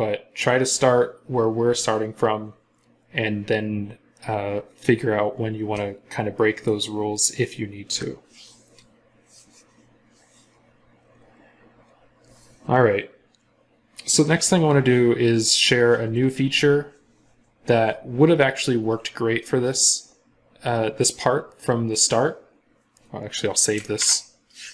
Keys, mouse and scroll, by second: 23.8 ctrl+s.